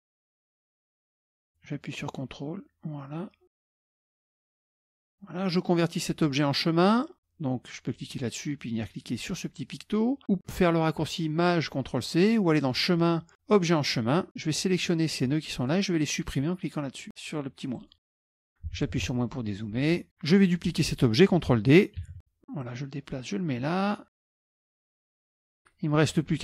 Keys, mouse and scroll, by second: 3.6 scroll up 2, 3.9 click, 4.0 click, 4.3 click, 4.6 click, 5.0 click, 8.0 click, 12.6 click, 13.7 click, 14.6-16.1 drag, 17.8 click, 18.1 click, 18.7 KP_Subtract, 18.9 KP_Subtract, 19.1 KP_Subtract, 19.6 middle click, 20.0 scroll down 2, 20.1 click, 22.1 ctrl+d, 22.7-24.2 drag, 24.2 scroll up 1, 24.4 click, 24.8 ctrl+shift+click, 25.5-25.8 ctrl+scroll down 2, 25.8 ctrl+middle click.